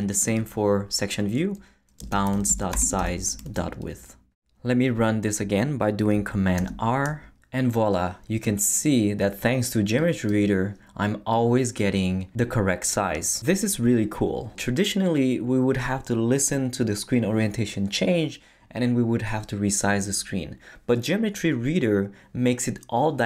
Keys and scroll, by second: 1.8-3.5 typing, 6.6 super+r.